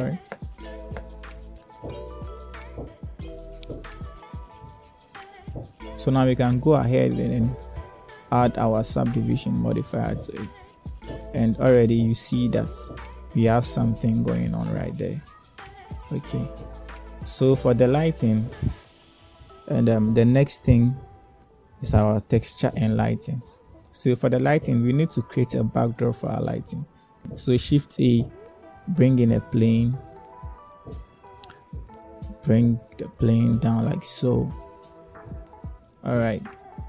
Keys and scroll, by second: 28.8 shift+a, 32.2 1.